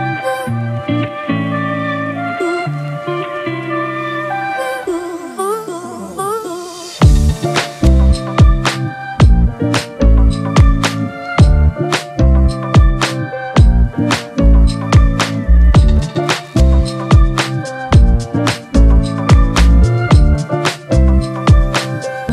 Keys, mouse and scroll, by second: 1.3 alt+shift+click, 6.1 Return, 9.9 double click.